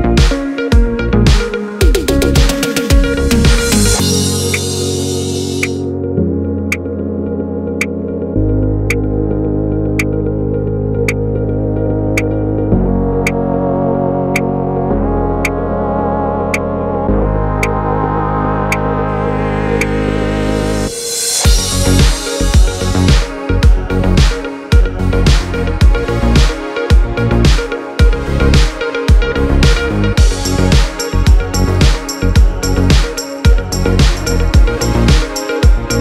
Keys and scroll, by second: 24.6 r.